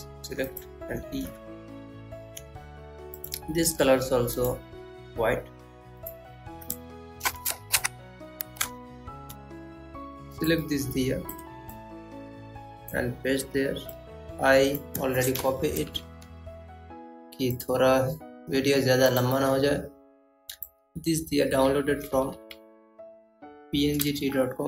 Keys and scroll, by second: 14.9 Down, 20.7 Down, 21.1 Right, 23.0 Up.